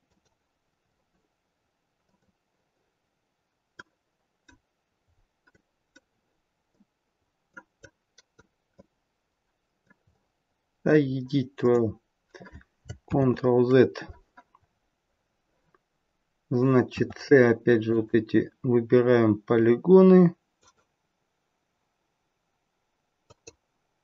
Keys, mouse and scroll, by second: 5.5 right click, 7.8 click, 8.7 middle click, 10.0-10.8 scroll up 1, 10.8 middle click, 11.0-11.5 scroll down 2, 11.5 middle click, 13.1 ctrl+z, 14.6-15.1 scroll up 1, 15.1 scroll down 1, 16.9 c.